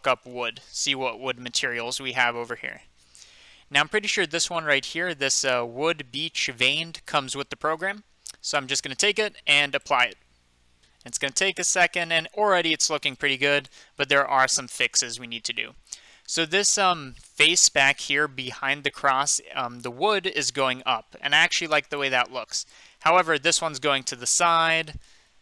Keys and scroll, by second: 0.0-1.0 typing.